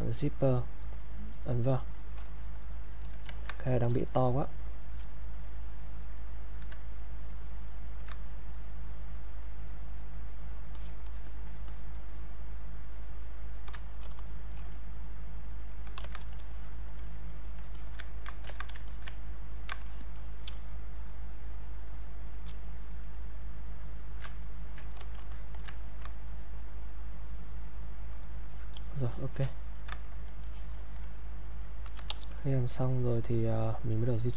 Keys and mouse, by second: 3.2 ctrl+z, 3.9 space, 4.3 click, 4.5 space, 5.6 click, 6.8 ctrl+right click, 8.3-10.3 drag, 10.3 click, 12.3-14.0 drag, 14.0 shift+f, 14.7 click, 16.0 ctrl+z, 16.5 alt+click, 17.4 click, 17.7 alt+click, 17.8 alt+click, 18.5 ctrl+z, 18.9 alt+click, 19.2 ctrl+right click, 19.8 ctrl+alt+click, 20.5 space, 23.4 click, 24.4 ctrl+right click, 24.9 click, 25.3 alt+click, 25.8 ctrl+right click, 28.5 alt+click, 29.5 ctrl+right click, 30.5 alt+click, 31.2 click, 32.1 e, 32.9-34.3 drag.